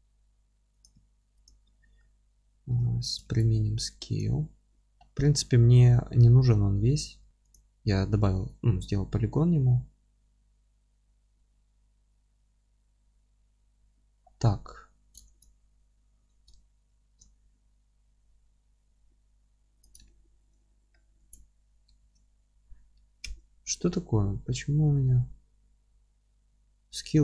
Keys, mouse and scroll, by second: 0.8 click, 0.9 s, 1.4 click, 1.6 scroll down 1, 1.9-2.4 scroll up 1, 2.4 Tab, 4.2 ctrl+a, 4.8 Tab, 7.3 click, 8.4 alt+e, 14.1-14.5 scroll down 1, 14.5-19.8 middle drag, 14.8-15.2 scroll down 1, 15.2 ctrl+z, 16.9 ctrl+shift+z, 18.0 e, 19.8 click, 20.0-27.2 alt+middle drag, 20.6-20.9 scroll up 1, 21.2 ctrl+z, 22.0 Tab, 23.3 n.